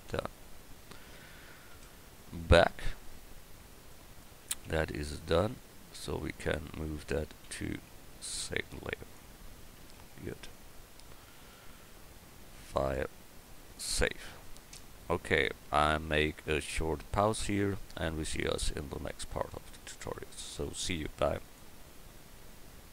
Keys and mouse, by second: 0.0 Escape, 1.7 KP_0, 6.0-7.4 right drag, 7.4 m, 12.6-14.1 drag.